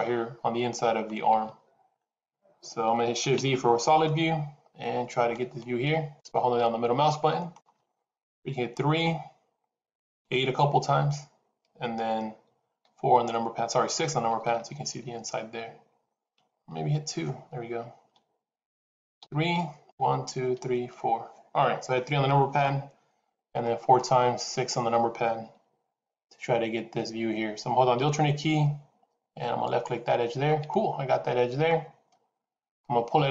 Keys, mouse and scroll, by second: 3.3 shift+z, 3.9 middle click, 8.3 KP_3, 10.0 KP_8, 10.8 KP_8, 12.7 KP_4, 13.8 KP_6, 14.1 KP_6, 16.3 KP_2, 16.6 KP_2, 19.1 KP_3, 19.8 KP_6, 20.1 KP_6, 23.5-24.0 scroll up 4, 29.5 alt+click, 30.6 middle click.